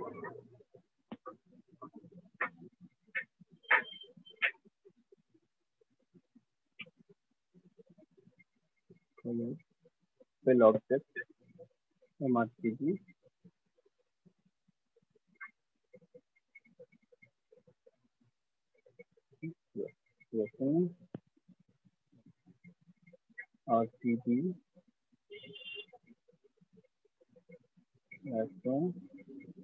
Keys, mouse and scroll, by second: 0.0 alt+click, 2.5 click, 3.8 click, 6.7 click, 9.3 click, 9.4 click, 9.6 click, 9.7 click, 11.5 click, 12.5 click, 13.5 click, 13.7 click, 13.9 click, 15.5 click, 16.6 click, 17.3 click, 18.7 click, 19.8 click, 21.8 click, 26.9 ctrl+click, 27.7 click, 28.8 ctrl+click.